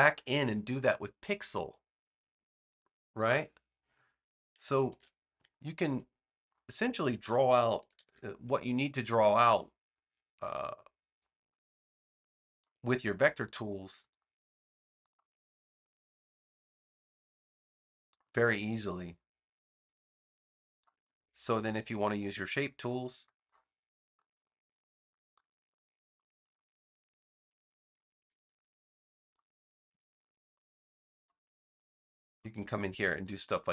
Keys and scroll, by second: 4.8 super+z, 7.7 super+-, 13.0 a, 29.8 v.